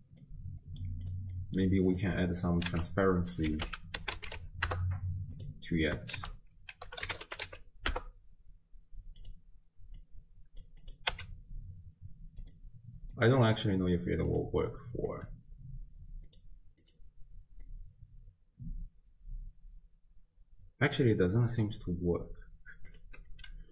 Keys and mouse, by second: 0.3 middle click, 1.1 click, 1.3 click, 1.9 click, 2.7 ctrl+a, 6.2 ctrl+a, 10.1-10.8 drag, 11.1 n, 13.1-14.5 drag, 16.3 click, 17.6-20.9 drag, 23.3 n.